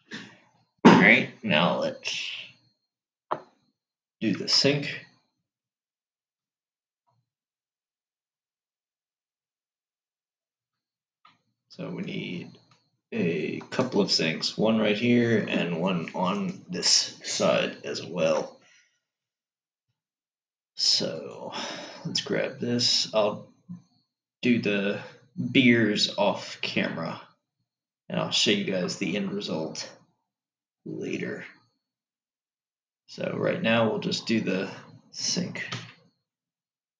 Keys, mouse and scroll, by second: 1.6-2.3 scroll down 6, 3.5-5.4 scroll down 4, 5.4-8.3 middle drag, 8.3-10.1 scroll down 8, 10.1-10.7 scroll up 5, 11.6-15.3 shift+middle drag, 21.4 click, 36.4 Tab.